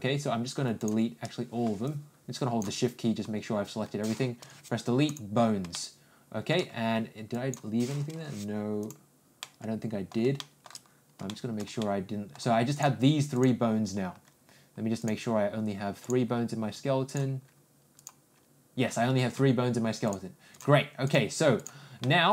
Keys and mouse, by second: 1.8 shift+click, 5.7 shift+middle click, 7.3 click, 9.4 middle click, 10.3 shift+middle click, 11.3 shift+middle click, 11.8 middle click, 12.7 click, 13.3 click, 16.0 click, 17.9 click, 20.0 click, 21.0 click, 21.5 click, 22.0-22.3 middle drag.